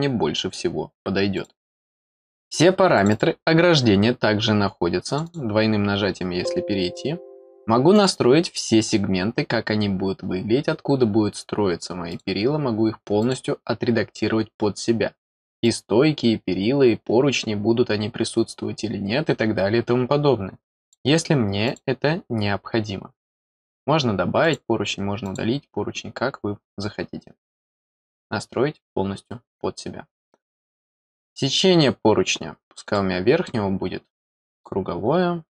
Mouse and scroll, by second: 1.3 click, 2.9 click, 5.0 click, 5.2 click, 7.9 click, 12.1 click, 13.2 click, 15.6 click, 20.8 click, 21.6 click, 23.6 click, 24.4 click, 25.2 click, 31.0 click, 32.8 click, 34.5 click.